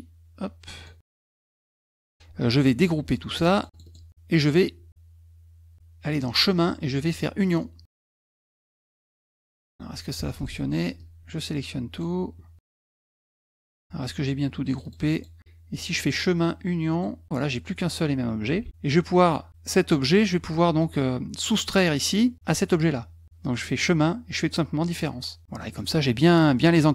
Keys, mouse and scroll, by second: 1.0 shift+click, 3.4 click, 3.5 click, 3.7 click, 3.8 click, 6.1 click, 7.4 click, 8.8 click, 9.5 click, 10.2 F1, 10.4 click, 11.0-12.0 drag, 12.6 shift+click, 13.1 shift+click, 14.7 click, 14.8 click, 15.0 click, 15.1 click, 16.0 click, 16.9 click, 17.4-18.4 drag, 18.7 ctrl+z, 23.7 click, 24.9 click, 25.6 middle click, 25.6 scroll up 2, 25.8 middle click.